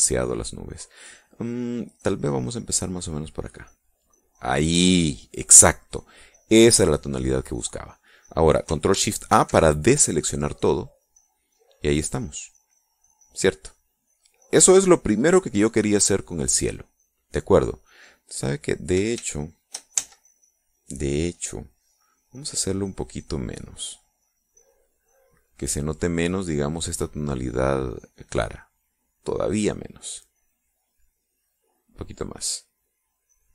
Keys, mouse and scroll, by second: 2.6-4.2 drag, 8.3 click, 9.8 ctrl+shift+a, 10.8-11.8 drag, 17.1-19.5 drag, 20.5 ctrl+shift+z, 22.0-25.2 drag, 30.0 click, 32.7 click.